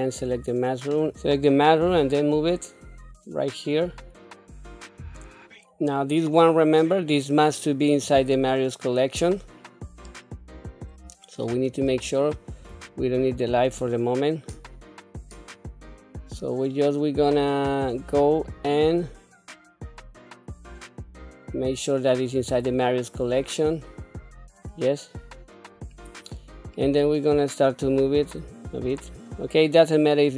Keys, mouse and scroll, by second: 2.1 g, 6.6-8.3 drag, 10.3-11.6 middle drag, 11.9 scroll down 1, 13.3 shift+click, 16.3-18.6 middle drag, 22.6 scroll down 2, 24.3 scroll up 2, 26.0 scroll down 2, 26.6 middle click, 27.9-29.4 drag.